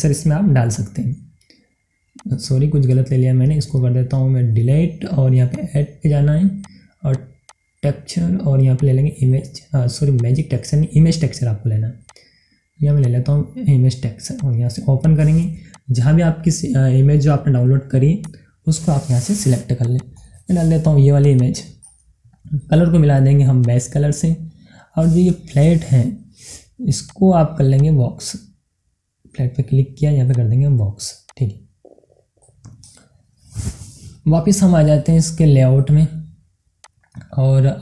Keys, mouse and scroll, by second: 1.1 scroll up 1, 2.1 click, 3.2 right click, 5.5 click, 11.3 right click, 12.0 click, 18.2 click, 20.8 scroll down 1, 21.5 click, 22.3-23.6 middle drag, 23.6-25.4 drag, 25.4-27.0 scroll up 1, 27.0 click, 28.9-29.2 scroll up 1, 30.2 click, 32.1-32.5 scroll down 1, 33.4 middle click, 34.3 scroll down 1, 36.7 click.